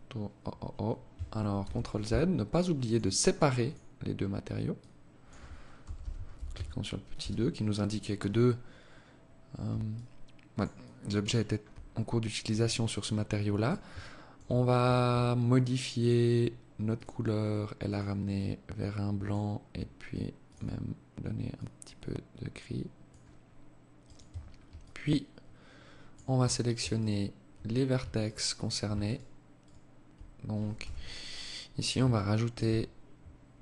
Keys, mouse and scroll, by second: 0.6 ctrl+z, 1.8 click, 2.6 click, 8.8 alt+click, 9.7 alt+click, 10.7-11.3 scroll up 3, 11.6 alt+click, 12.9 alt+shift+click, 15.9 click, 19.4 click, 23.2 Tab, 23.7 alt+click, 25.9 alt+right click, 27.2 alt+right click, 28.0 alt+right click, 28.6 alt+right click, 29.7 z, 30.2 scroll up 2, 31.1 alt+shift+click, 33.4 ctrl+r.